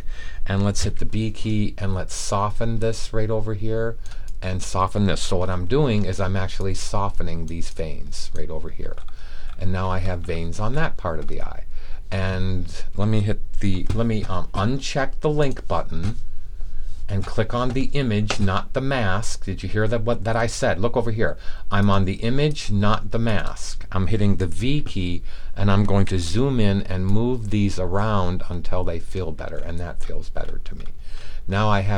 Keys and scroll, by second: 0.7 b, 24.5 v.